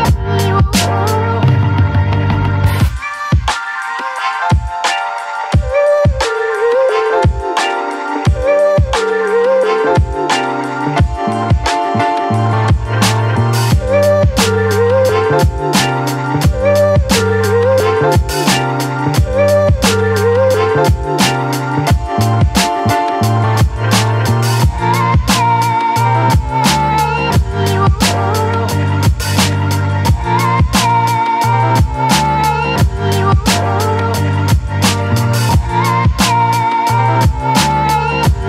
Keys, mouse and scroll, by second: 1.1-3.0 ctrl+drag, 3.0 ctrl+t, 3.9-7.4 alt+drag, 8.0 space, 8.5 alt+click, 9.6-15.5 ctrl+drag, 13.1 ctrl+Num_Lock, 15.5-18.0 ctrl+drag, 18.0 click, 19.2-26.4 ctrl+drag, 26.4 space, 26.7 click, 26.9 space, 28.1 ctrl+t, 28.6-30.8 drag, 30.8 space, 32.2-33.9 alt+drag, 33.9-35.3 alt+drag, 35.3 space, 35.5-37.1 ctrl+drag, 37.1 ctrl+t, 37.8 click, 37.8-38.4 drag.